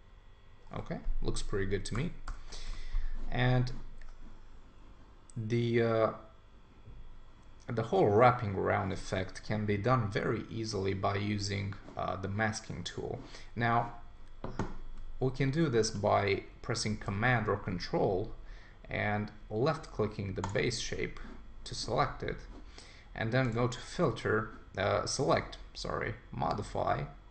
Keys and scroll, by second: 1.9 super+=.